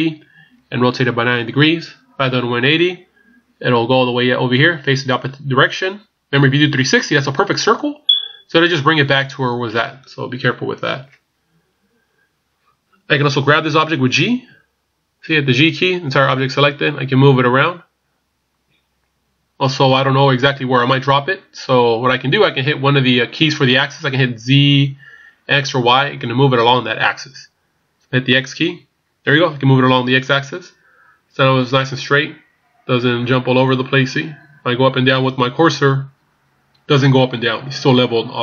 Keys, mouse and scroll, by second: 11.6 scroll down 1, 12.3 scroll down 2, 14.3-15.2 scroll up 1, 14.3 g.